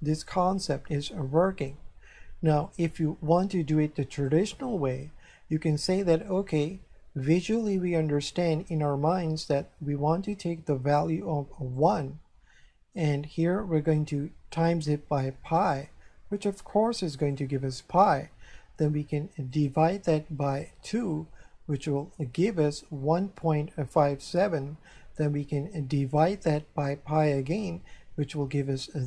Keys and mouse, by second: 0.0 shift+middle click, 2.7 click, 4.2 click, 11.8 click, 14.6 click, 17.2 click, 19.6 click, 20.9 click, 22.0 click, 26.1 click, 27.2 click, 28.6 click.